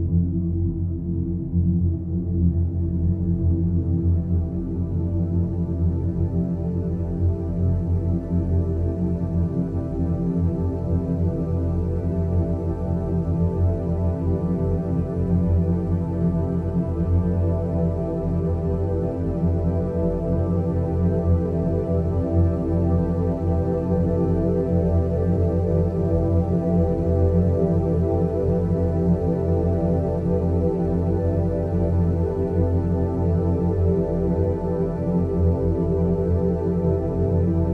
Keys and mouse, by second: 0.4 g, 3.2 click, 3.4 g, 5.8 click, 6.0 g, 9.8 click, 10.0 g, 12.4 click, 12.5 g, 15.8 g, 17.2 click, 17.3 g, 18.6 middle click, 21.0 click, 22.3 e, 23.7 e, 26.9 e, 27.7 e, 28.9 e, 29.8 e, 32.3 click, 34.3 a, 35.0 g, 37.0 Tab.